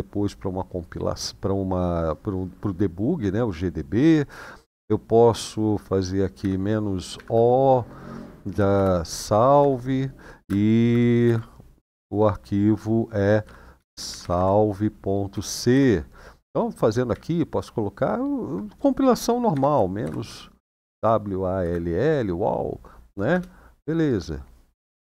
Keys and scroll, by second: 6.2-6.9 typing, 8.5-9.6 typing, 11.0 typing, 13.2-13.9 typing, 15.1-15.5 typing, 16.6-23.5 typing.